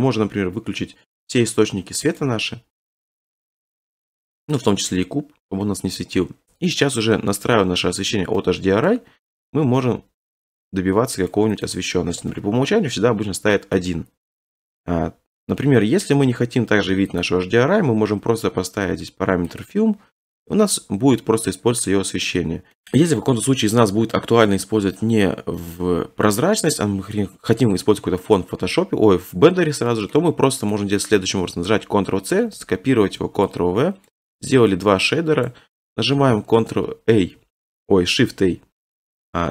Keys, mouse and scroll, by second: 2.2-4.3 drag, 4.6-6.7 drag, 6.7-7.8 middle drag, 6.7-7.8 scroll, 8.8 middle click, 10.0-10.9 scroll, 11.3 click, 11.6 click, 12.1 1, 13.3-13.8 scroll, 15.0-15.6 scroll, 15.7-16.3 scroll, 17.2 click, 18.6-19.2 scroll, 19.6 click, 20.4 scroll, 21.0-21.6 scroll, 22.7 scroll, 23.3-25.0 scroll, 25.0-25.5 scroll, 28.4-29.4 scroll, 30.1 scroll, 30.7 click, 31.1-32.0 scroll, 32.5 ctrl+c, 33.0 ctrl+v, 34.1 click, 34.6 middle click, 35.4 click, 37.1 q, 38.5 a.